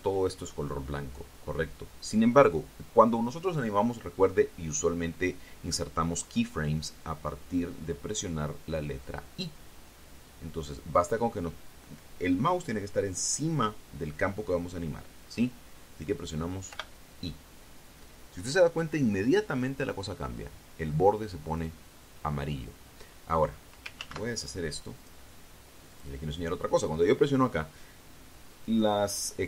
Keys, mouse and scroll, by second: 17.5 i, 24.8 ctrl+z, 25.8 click, 26.7 click.